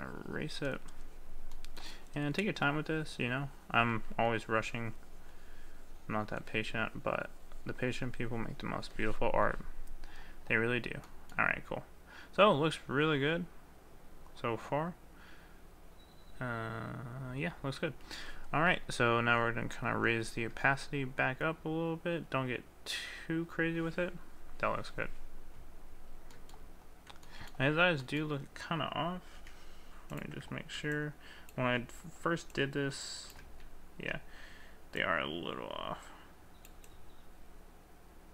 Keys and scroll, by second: 31.8 ctrl+z, 33.4 ctrl+z.